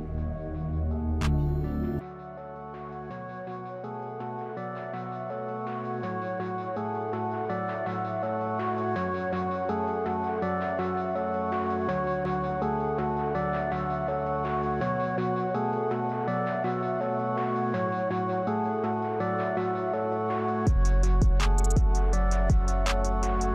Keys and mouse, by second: 1.7 shift+a, 6.6 g, 7.0 s, 8.1 shift+z, 8.3 s, 8.8 s, 10.1 g, 10.9 g, 11.6 click, 11.9 g, 13.2 s, 15.0 shift+middle click, 16.0 s, 17.0 s, 17.6 shift+middle click, 18.4 Tab, 18.7 click, 18.9 Tab, 19.4 Tab, 19.6 click, 19.7 Tab, 20.3 click, 20.8 x, 21.2 click, 22.4 click, 22.9 x.